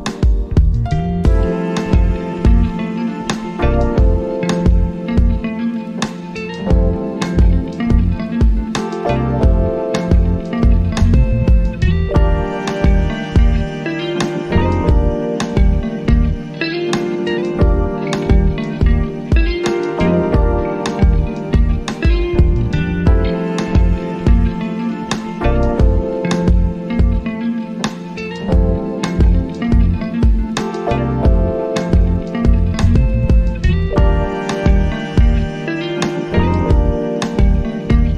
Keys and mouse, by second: 4.9 click, 7.9 click, 10.8 click, 13.3-32.4 drag, 35.7 click.